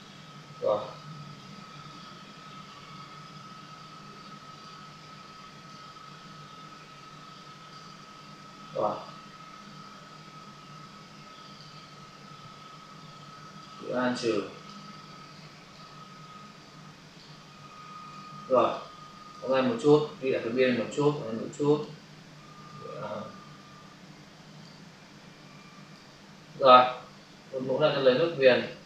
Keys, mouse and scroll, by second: 0.8 click, 1.7 click, 2.7 alt+click, 4.9 click, 6.0 alt+click, 8.9 alt+click, 9.1 click, 13.7 alt+click, 15.3 alt+click, 16.4 click, 18.0 click, 18.7 ctrl+click, 22.7 alt+click, 25.6 alt+click, 26.8 click.